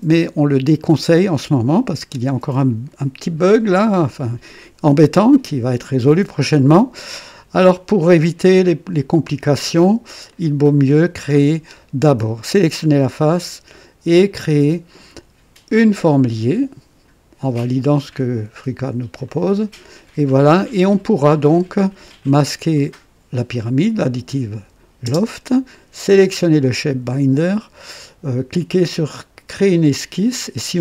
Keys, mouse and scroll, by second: 10.2 click, 12.5 click, 15.9 click, 19.2 click, 22.1 click, 25.0 space, 26.0 click, 29.7 click.